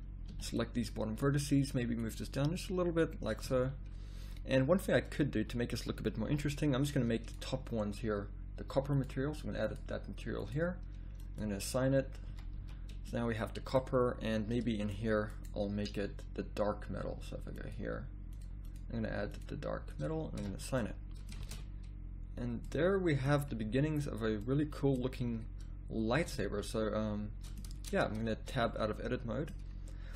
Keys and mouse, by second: 0.3 b, 2.1-3.4 drag, 3.4 a, 5.3 z, 5.7 z, 6.2 b, 12.3 a, 12.6 z, 14.8 click, 20.3 a, 20.5 middle click, 21.7 shift+z, 26.2 z, 26.3 z, 27.7 Tab, 28.2 a.